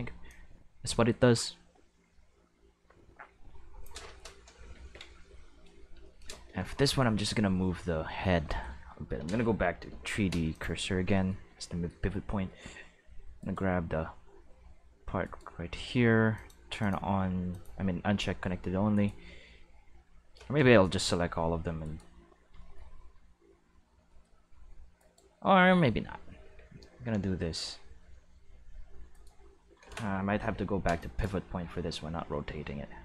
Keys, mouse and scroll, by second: 0.2-3.8 drag, 4.6 ctrl+s, 4.8 ctrl+s, 9.8 Right, 10.5 click, 13.4 right click, 14.4 r, 15.2 right click, 16.3 click, 16.8 click, 17.5 click, 18.4 r, 18.9 right click, 20.4 a, 20.5 middle click, 20.9 r, 21.0 middle click, 21.8 right click, 21.9-22.6 middle drag, 25.0 right click, 26.4 g, 27.7-29.1 middle drag, 29.1 right click, 31.0 click, 31.6 g, 32.6-33.0 middle drag.